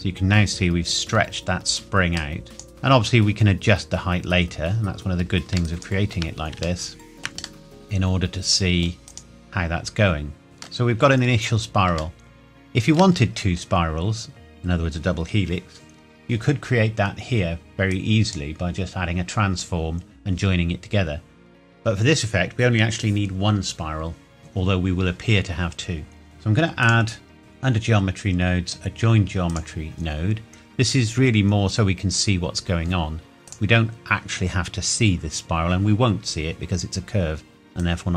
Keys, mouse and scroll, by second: 1.2 scroll down 1, 2.2 click, 2.4 middle click, 5.7 shift+right click, 5.8 shift+middle click, 6.8 shift+middle click, 7.6 middle click, 9.1 right click, 9.2 middle click, 10.9-11.6 scroll up 1, 12.2 shift+middle click, 13.2 scroll down 1, 17.9 click, 26.8 click, 29.5 click, 33.5 click, 37.8 click.